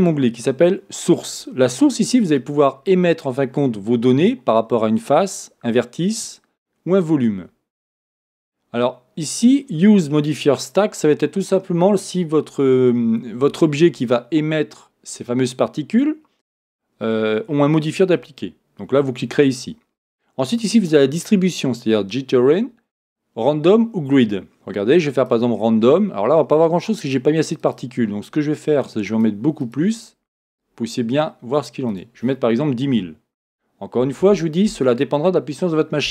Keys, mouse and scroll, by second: 2.3-27.8 drag, 29.1 click, 31.9-36.1 drag, 34.3 KP_0.